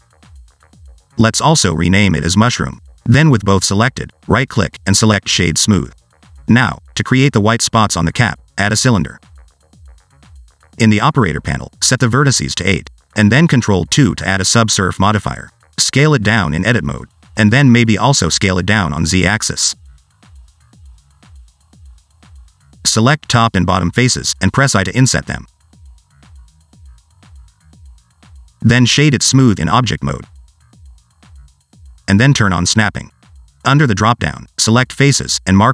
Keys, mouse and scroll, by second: 1.0 click, 1.3 F2, 2.5 o, 4.2 a, 4.7 right click, 7.2 shift+right click, 8.2 shift+a, 10.4 click, 11.3 click, 13.3 click, 14.3 ctrl+2, 15.1 Tab, 15.5 s, 16.7 middle click, 17.1-17.5 scroll up 2, 17.5 middle click, 17.9 s, 19.1 s, 20.9 middle click, 21.3-22.1 scroll up 2, 22.1 /, 22.8 3, 23.0 click, 23.4 middle click, 23.9 shift+click, 24.2 middle click, 24.8 i, 26.2 s, 27.4 ctrl+r, 28.2 ctrl+b, 28.8 Tab, 29.2 right click, 30.6 scroll down 2, 30.8 middle click, 31.0-31.4 scroll up 3, 31.2 shift+middle click, 31.8 s, 33.7 click, 34.4 click.